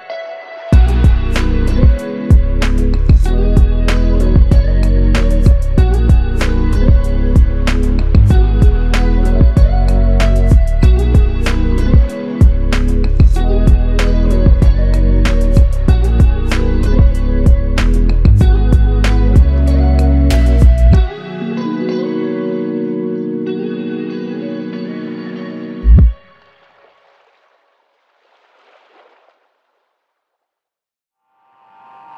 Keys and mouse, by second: 3.2 alt+click, 7.1-8.4 typing, 13.7 double click, 18.6 double click, 23.5 alt+click, 25.4 alt+click, 27.2 alt+click.